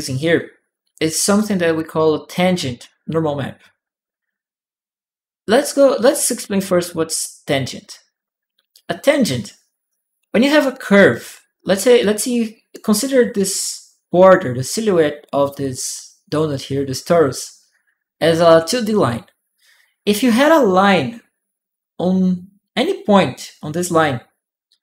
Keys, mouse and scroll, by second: 1.1 click, 1.2 right click, 1.7 click, 5.9 click.